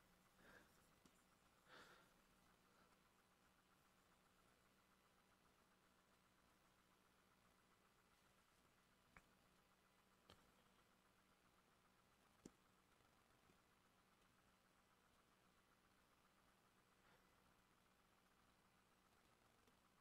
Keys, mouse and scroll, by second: 14.4-20.0 drag.